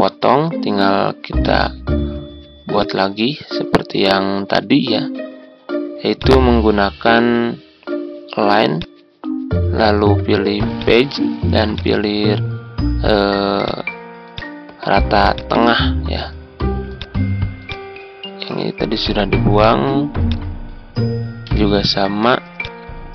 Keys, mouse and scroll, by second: 1.3-15.1 drag, 15.3 shift+click, 19.0 Delete, 20.2 click, 21.4 Delete, 22.6 shift+click.